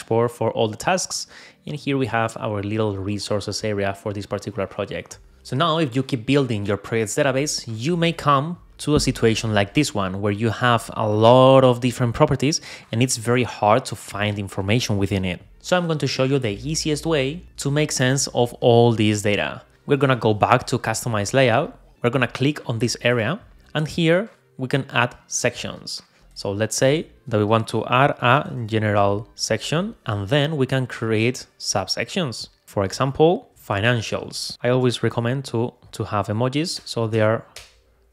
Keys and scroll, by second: 29.3 Return, 34.5 alt+Up, 35.1 alt+super+e, 36.1 Right, 36.7 Return.